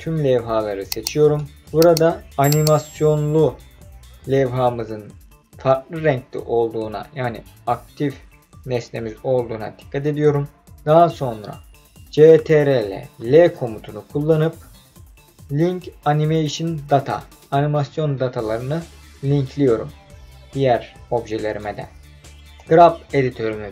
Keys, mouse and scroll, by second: 13.2 ctrl+l, 22.6-23.7 drag.